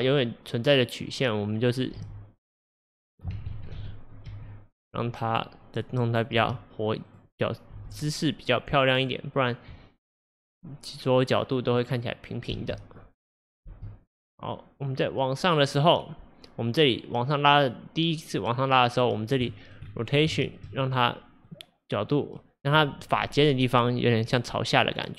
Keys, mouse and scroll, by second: 2.1 g, 3.6 ctrl+z, 4.4 g, 5.3 click, 6.4 r, 7.8 g, 11.8-12.6 scroll down 1, 12.6 space, 13.7 space, 14.1-19.6 drag, 19.6 shift+middle click, 19.9-20.4 scroll up 1, 20.4 shift+middle click, 20.7-21.5 shift+scroll up 1, 21.5 click, 25.0 click.